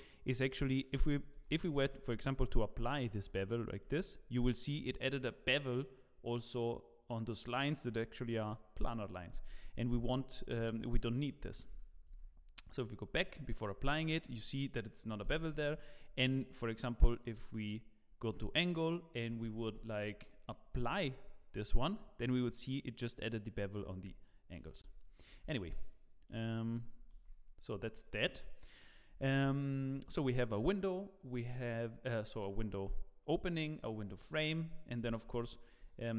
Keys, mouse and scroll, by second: 1.3 Tab, 2.4 Tab, 3.3 ctrl+a, 3.8 Tab, 10.6 Tab, 11.4 ctrl+z, 12.8 ctrl+z, 14.0 Tab, 16.4 Tab, 16.4 click, 19.3 Tab, 20.1 Tab, 21.0 ctrl+a, 21.6 Tab, 24.6 ctrl+z, 25.6 ctrl+z, 26.3 Tab, 26.9-27.7 scroll down 5, 27.1 Tab, 27.8 shift+middle click, 28.2 click, 28.6 middle click, 29.0-29.4 scroll up 5, 29.4 shift+middle click, 30.8 click, 31.6 scroll down 5, 34.0 scroll up 3, 34.4 middle click, 34.9-35.4 scroll up 4, 35.8 shift+middle click.